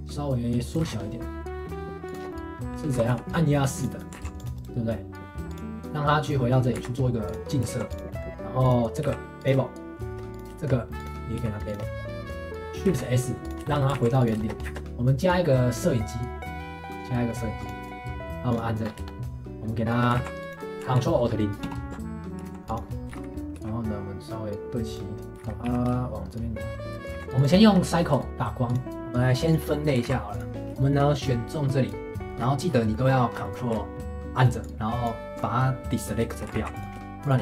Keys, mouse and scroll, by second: 2.3-2.9 middle drag, 2.9 g, 4.0 middle click, 4.2 ctrl+s, 4.5-5.9 right drag, 6.6 middle click, 6.7 alt+x, 7.3 click, 7.5 middle click, 7.7 ctrl+s, 8.1 middle click, 8.6 click, 9.0 q, 10.3 click, 10.5 shift+middle click, 11.0 click, 11.4 q, 12.7 middle drag, 12.9 shift+s, 13.6-13.9 shift+middle drag, 13.9 ctrl+s, 14.4 shift+middle click, 14.6 shift+a, 18.5 click, 18.8 scroll up 1, 19.0-20.1 shift+middle drag, 20.1 ctrl+s, 21.6 ctrl+alt+KP_0, 22.2 scroll up 1, 22.3 r, 22.4 ctrl+s, 23.1 g, 25.2 shift+click, 25.3 g, 26.8 click, 27.1 ctrl+s, 27.6 shift+middle click, 28.3 shift+a, 28.9-30.0 shift+middle drag, 30.0 ctrl+s, 30.5 click, 30.8-31.2 shift+middle drag, 31.2 click, 31.5 click, 32.4-32.9 scroll down 3, 32.9-34.6 middle drag, 34.6 ctrl+click, 36.3 shift+middle click, 36.5 ctrl+s, 37.2 shift+click.